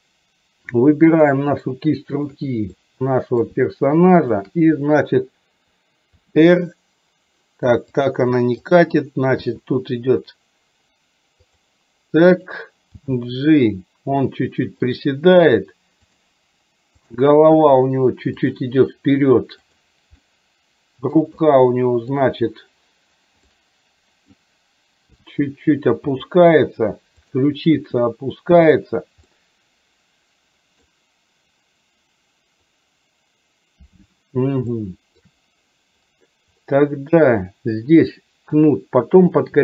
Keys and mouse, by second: 1.1 click, 2.2 shift+click, 2.9 middle click, 4.3 shift+click, 6.3 r, 8.7 click, 9.5 r, 12.3 click, 13.1 g, 17.1 click, 17.6 r, 19.7 click, 20.4 middle click, 21.4 middle click, 23.5 middle click, 25.2 g, 27.5 click, 27.9 r, 29.4-31.0 middle drag, 34.7 shift+middle click.